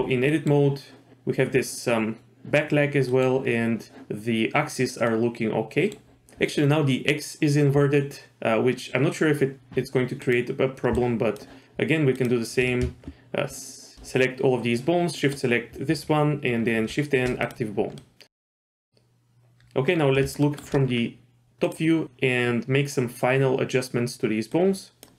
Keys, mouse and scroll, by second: 0.3 middle click, 3.1 middle click, 3.5 scroll up 1, 5.1 middle click, 10.2 click, 10.9 shift+click, 12.1 shift+click, 16.8 shift+n, 18.0 middle click, 18.2 scroll down 1, 18.5 KP_7, 18.9 shift+middle click, 19.9-20.4 scroll down 2, 20.4 shift+middle click, 20.9-21.6 scroll up 2, 21.6 click, 22.0 g, 24.5 click.